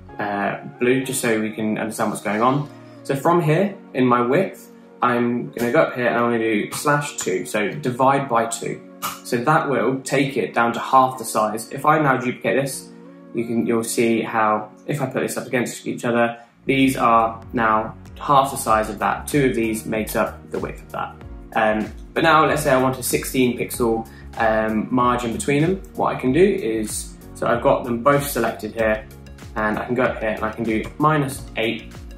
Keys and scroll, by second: 6.0 Right, 7.2-7.7 typing, 9.5 Return, 12.0-12.7 typing, 30.3 Tab, 31.3 -, 31.8 8.